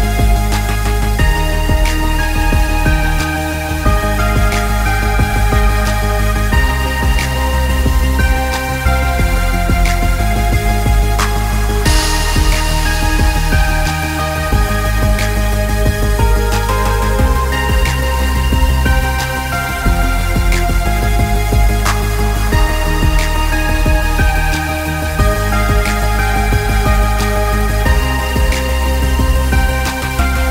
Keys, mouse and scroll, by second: 1.9 click, 4.0 click, 6.3 alt+scroll up 1, 7.5 click, 10.4 click, 11.8 click, 14.6 click, 19.8 ctrl+click, 26.2 click.